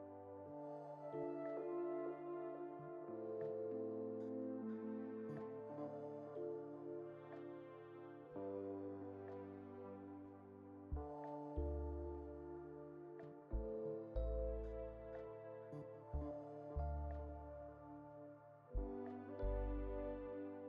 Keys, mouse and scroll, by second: 1.7 2, 1.9 click, 2.1 click, 2.5 shift+middle click, 3.5 click, 4.8 shift+middle click, 5.5 1, 5.7 middle click, 6.8 click, 8.4-9.6 shift+middle drag, 9.6-12.6 drag, 12.7-14.4 middle drag, 14.4 click, 14.8 Tab, 15.3-16.6 shift+middle drag, 16.6-20.2 right drag, 20.2-20.6 shift+middle drag.